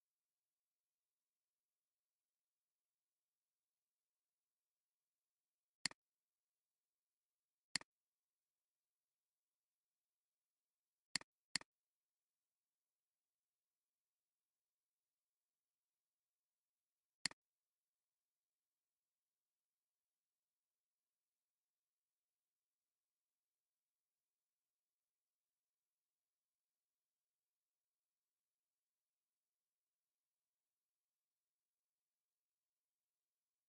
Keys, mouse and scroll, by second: 7.7 click, 11.6 double click, 12.4-13.7 typing, 17.2 click, 33.2-33.6 typing.